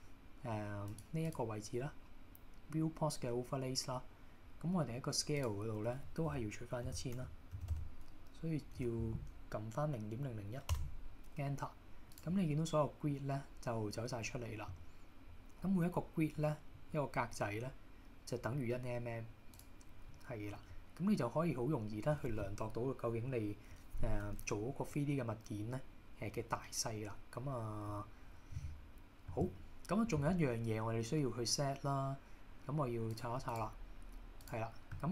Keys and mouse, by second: 1.5-11.6 drag, 7.8 KP_0, 12.6-13.1 middle drag, 16.4-16.7 middle drag, 20.1-20.6 middle drag.